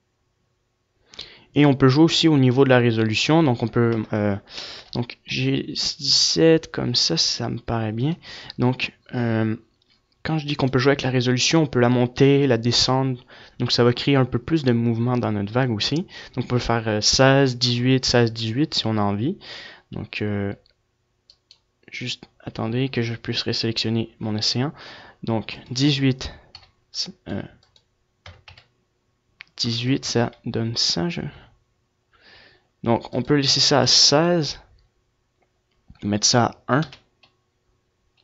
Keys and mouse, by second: 6.6 KP_0, 8.0 g, 11.4-14.9 drag, 14.9-16.5 right drag, 26.5-28.2 middle drag, 28.2-32.5 drag, 34.9-36.5 drag.